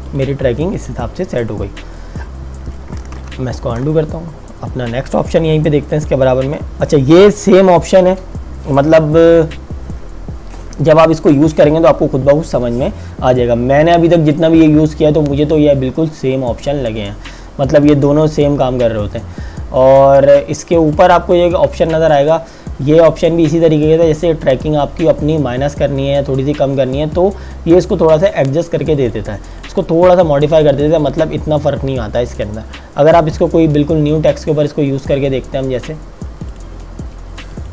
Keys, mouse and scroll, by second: 0.1 click, 3.2 z, 5.9 click, 14.3 click, 21.0 click, 29.0 click, 36.7 click.